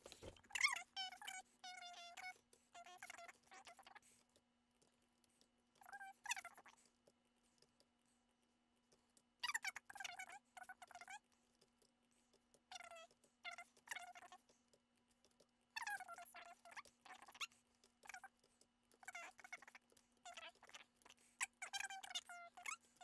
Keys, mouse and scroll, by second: 1.2 middle click, 2.2 middle click, 2.3 Tab, 2.5 Tab, 2.7 middle click, 2.8 scroll up 1, 3.3 shift+middle click, 3.8 right click, 5.0 double click, 5.4 typing, 5.5 right click, 6.1 double click, 6.7 typing, 6.7 right click, 9.1-9.5 typing, 9.7 shift+middle click, 10.6 double click, 12.5 typing, 13.9-15.4 typing, 18.2-19.9 typing, 18.2 double click, 18.9 shift+middle click, 20.0 shift+middle click, 21.0 typing, 21.0 shift+middle click, 21.2 middle click, 21.7 shift+middle click, 22.6 shift+middle click.